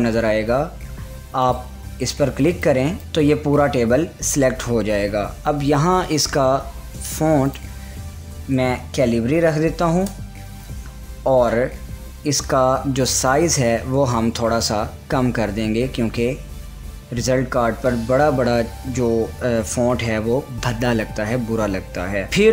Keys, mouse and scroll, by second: 1.5 click, 7.5 click, 7.6 click, 8.9 c, 10.1 Return, 13.2 click, 15.0 click, 22.3 click.